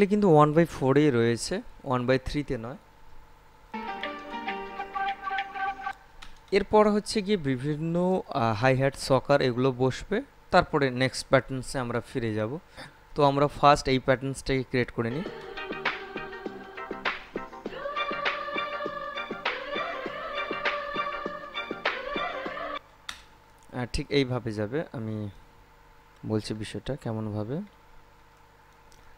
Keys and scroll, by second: 3.9 space, 6.0 space, 15.2 space, 22.9 space.